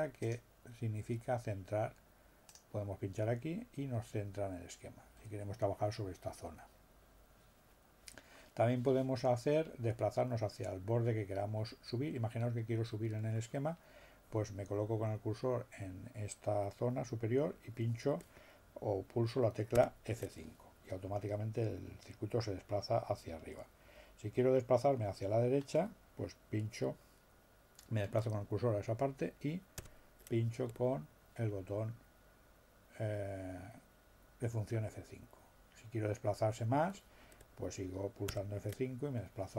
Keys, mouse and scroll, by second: 0.3 click, 2.5-3.8 drag, 19.8 F5, 29.8 F5, 38.3 F5.